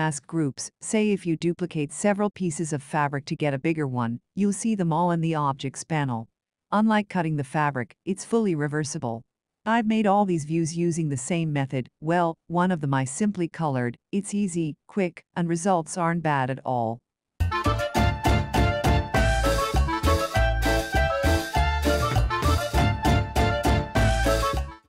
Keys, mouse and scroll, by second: 7.3 ctrl+scroll, 8.1-8.4 ctrl+scroll, 9.2 Up, 9.8 Left, 10.8 Down, 11.1 Right, 12.7-13.1 ctrl+scroll.